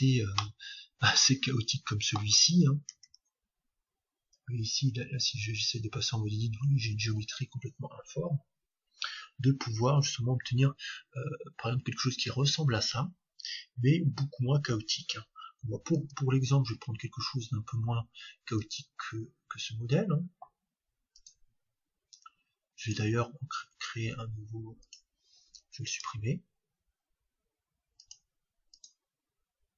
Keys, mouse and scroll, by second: 5.0 Tab, 18.6-20.5 drag, 23.1-25.0 drag, 26.1-28.1 right drag, 28.1-29.7 drag.